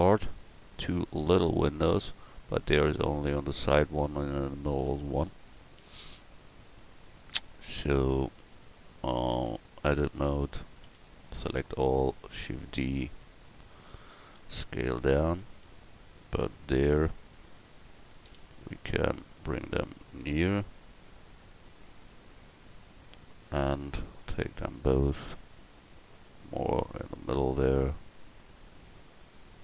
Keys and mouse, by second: 9.5 Tab, 10.9 a, 11.1 a, 12.2 shift+d, 13.6 click, 14.4 s, 18.3 a, 19.6 l, 21.5 click, 24.3 l, 25.0-28.5 drag.